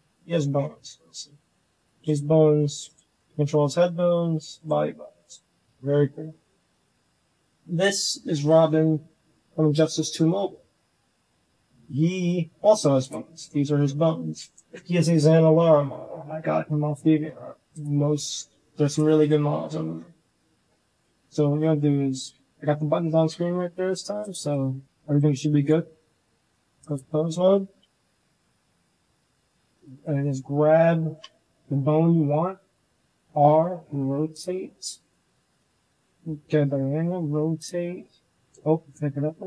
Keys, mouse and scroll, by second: 0.2 KP_5, 0.6 KP_1, 2.2 g, 3.8 h, 4.1 g, 5.0 h, 5.9 click, 6.6 click, 8.4 click, 8.7 g, 13.2 g, 17.6-19.0 drag, 24.5-26.8 drag, 29.6 click, 30.7 shift+drag, 32.7 r, 34.5-35.0 drag, 35.1 shift+drag, 35.1 shift+right drag, 35.7 click, 35.7 right click, 36.2 r, 37.7-38.4 drag, 37.7-38.4 right drag, 38.7 r.